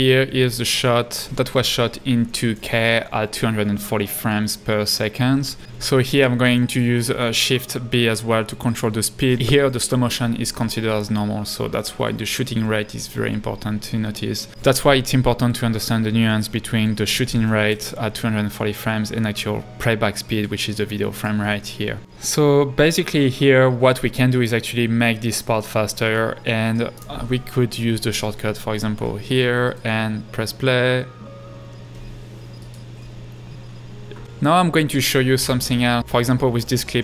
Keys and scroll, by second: 28.9 space, 36.1 space.